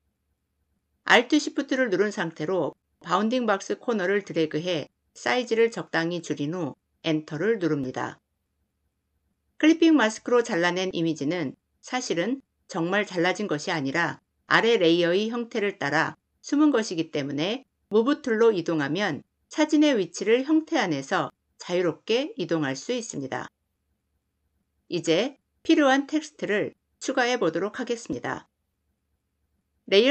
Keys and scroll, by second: 6.6 Return.